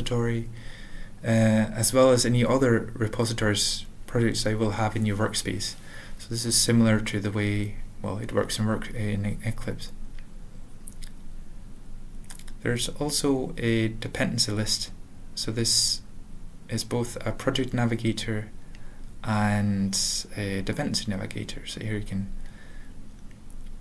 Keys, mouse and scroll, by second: 0.3 ctrl+n, 0.9 Tab, 3.8 click, 4.1 ctrl+n, 4.3 ctrl+n, 4.8 ctrl+a, 5.0 ctrl+k, 5.4 ctrl+p, 5.6 ctrl+a, 5.8 ctrl+s, 6.0 ctrl+p, 6.6 ctrl+p, 6.6 ctrl+n, 6.8 ctrl+n, 6.9 ctrl+n, 7.4 ctrl+k, 8.0 ctrl+/, 8.2 ctrl+s, 8.4 ctrl+p, 8.7 ctrl+e, 8.7 ctrl+n, 10.0 alt+x, 10.8-13.4 typing, 13.8 Return, 15.6 click, 16.8 ctrl+n, 17.3 ctrl+p, 17.7 Return, 19.0 click, 19.7 click, 20.1 ctrl+a, 20.4 Tab, 20.8 ctrl+n, 21.2 ctrl+n, 21.8 ctrl+n, 22.6 Tab, 23.2 ctrl+n, 23.4 ctrl+n, 23.5-23.8 ctrl+n.